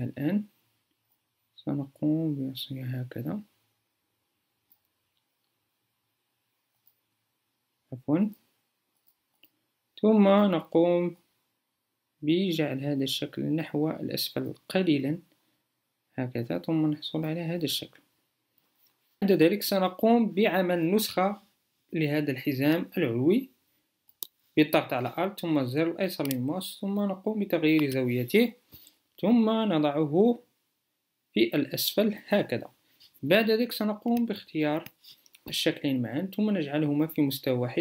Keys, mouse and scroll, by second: 21.0-26.1 alt+drag.